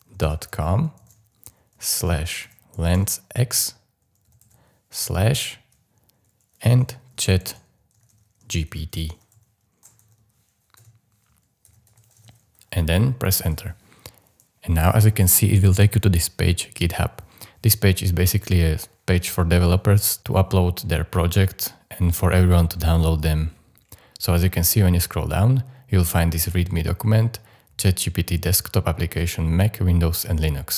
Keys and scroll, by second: 0.0-5.5 typing, 7.4-9.3 typing, 10.8-12.7 typing, 13.4 Return.